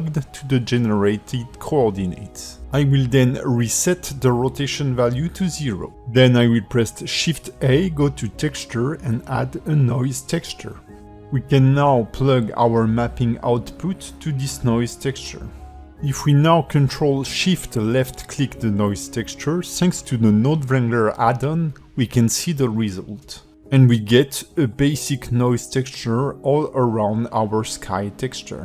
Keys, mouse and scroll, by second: 5.1 click, 5.6 shift+a, 14.7 click, 17.1 click, 20.2 ctrl+shift+click, 22.7 scroll down 2, 23.2 middle click, 23.8 ctrl+alt+space, 24.3 shift+middle click, 25.1 middle click, 26.8 shift+middle click, 27.5 ctrl+middle click, 27.9 shift+middle click, 28.4 middle click.